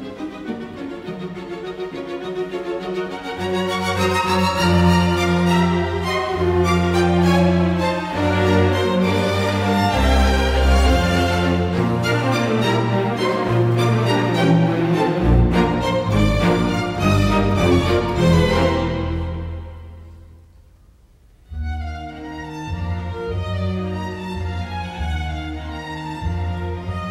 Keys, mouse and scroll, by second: 1.3 space, 3.8 space, 6.3 space, 6.9 Escape, 8.7 t, 8.8 space, 14.5 middle click, 22.2 t, 22.3 space, 22.9 Escape, 26.5 KP_Decimal, 26.9 Return.